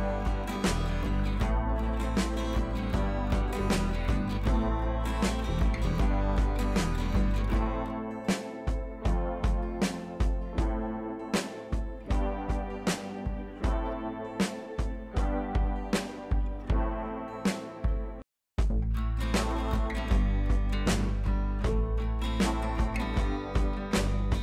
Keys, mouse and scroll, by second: 1.5-1.9 drag, 5.0 shift+click, 9.3-12.7 drag, 14.1 shift+click, 14.9-16.1 drag, 16.7 click, 17.5-17.9 click, 18.1-18.9 ctrl+t, 19.2 click, 22.1 ctrl+l, 22.9-23.5 drag.